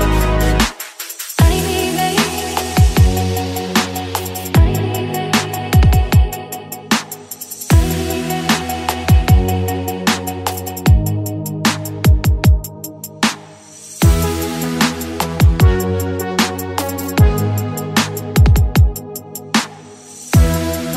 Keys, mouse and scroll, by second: 5.3-6.4 drag, 6.4 middle click, 7.4-8.6 scroll down 3, 8.6-9.4 scroll up 3, 9.4-10.6 scroll down 5, 10.6-14.0 drag, 14.0 Tab, 15.7-18.1 drag, 18.1-18.6 middle drag, 18.6 Tab, 18.9-20.9 middle drag.